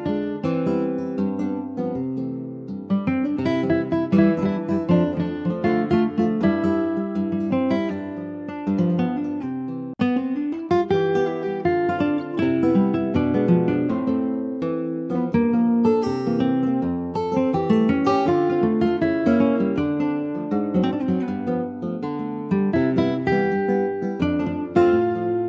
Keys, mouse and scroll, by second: 0.3 shift+middle click, 0.6 shift+scroll up 3, 1.1-2.5 shift+middle drag, 2.5 click, 6.7 Tab, 6.9 click, 7.1-7.5 scroll down 2, 7.5 middle click, 7.8 scroll down 2, 8.6 click, 8.9 middle click, 9.0 scroll up 2, 9.3 shift+middle click, 10.2 ctrl+s, 10.5 click, 10.9 middle click, 11.5 scroll up 2, 11.8 shift+middle click, 12.6 ctrl+s, 12.7 click, 13.2 shift+middle click, 13.8 click, 14.4 shift+middle click, 15.1 shift+click, 16.1 ctrl+j, 16.5 click, 16.9 scroll down 2, 17.1 click, 17.7 ctrl+s, 17.8 click, 18.4 alt+middle click, 19.4 alt+middle click, 20.2 ctrl+a, 23.3 shift+d, 24.5 s.